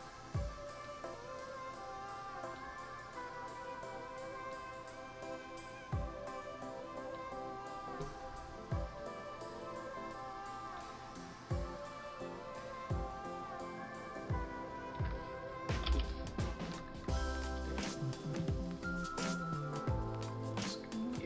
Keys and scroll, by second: 15.8 Return.